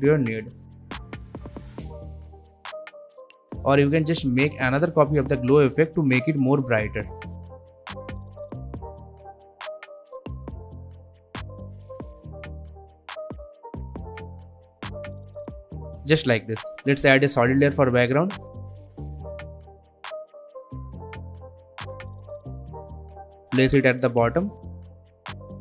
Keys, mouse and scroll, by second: 0.7-1.5 click, 1.8 ctrl+z, 2.2-3.3 click, 3.2 ctrl+z, 4.0 click, 4.7 ctrl+d, 5.5-6.0 scroll down 1, 6.0-6.4 scroll up 1, 6.4-6.9 scroll down 1, 7.2 drag, 7.6 space, 9.8 click, 10.3 alt+scroll down 1, 11.8-12.9 click, 13.1 n, 13.3-13.9 click, 13.7 space, 15.8 space, 16.1 click, 16.3 right click, 16.9-20.8 drag, 25.5-25.6 typing.